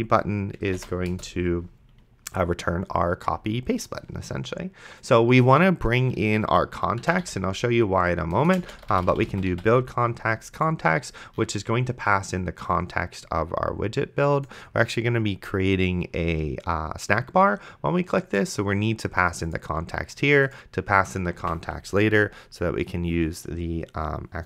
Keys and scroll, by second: 0.0-1.0 typing, 1.1 Return, 7.2 shift+u, 8.4 Return, 8.5-10.1 typing, 21.7 Tab.